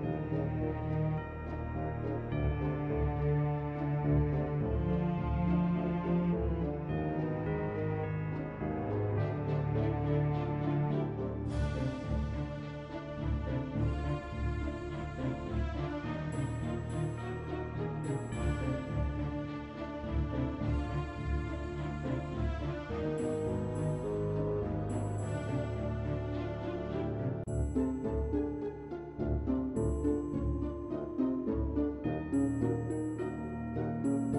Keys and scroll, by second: 10.2-11.5 typing, 13.1-14.9 typing, 16.5 ctrl+c, 23.9 ctrl+v, 28.8 ctrl+v.